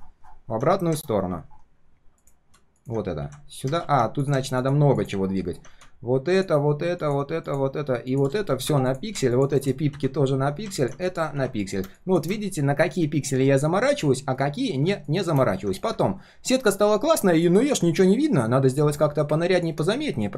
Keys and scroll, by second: 3.8 ctrl+z, 14.3 ctrl+shift+4, 14.6 ctrl+shift+4, 19.0 ctrl+shift+4, 19.7 ctrl+shift+4.